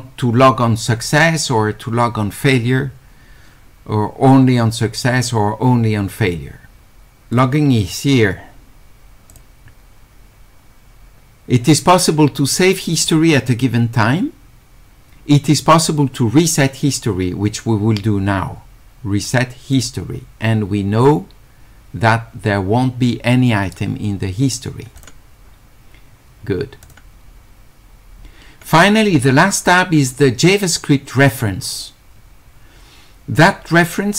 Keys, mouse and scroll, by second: 7.4 click, 9.3 click, 19.8 click, 25.0 click, 26.8 click, 31.3 click.